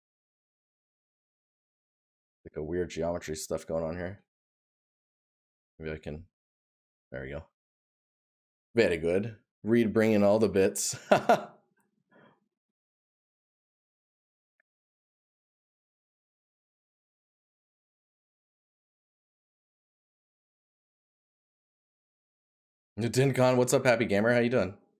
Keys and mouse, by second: 14.7 right click, 16.1 right click, 19.6 right click, 21.1 right click.